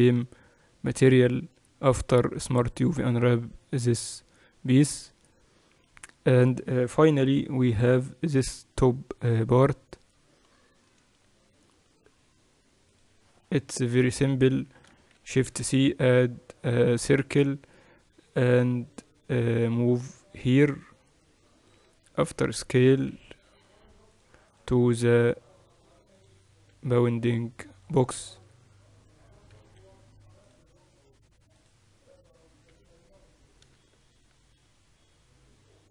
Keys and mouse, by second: 3.4-7.8 drag, 7.8 KP_1, 15.8 shift+c, 16.3 shift+a, 20.5-22.9 drag, 22.9 s, 24.8-27.1 drag, 29.2 s, 31.1-33.1 drag, 33.4 s.